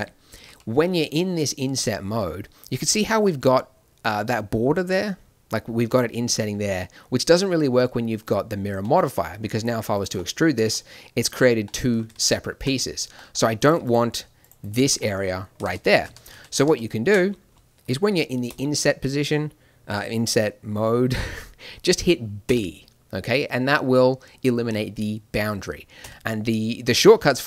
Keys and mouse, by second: 0.4 i, 9.4 e, 12.1 ctrl+z, 13.6-15.1 drag, 15.6 ctrl+z, 15.8 ctrl+z, 16.0 ctrl+z, 16.3 ctrl+z, 17.9 ctrl+z, 18.5 i.